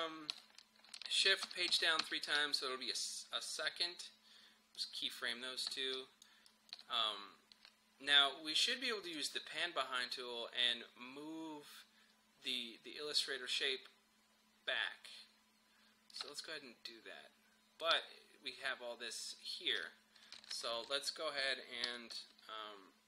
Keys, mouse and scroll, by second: 1.5 shift+Page_Down, 4.9 click, 6.0 shift+click, 16.2-20.6 drag, 20.6 ctrl+z, 21.9 v, 22.1-23.0 drag.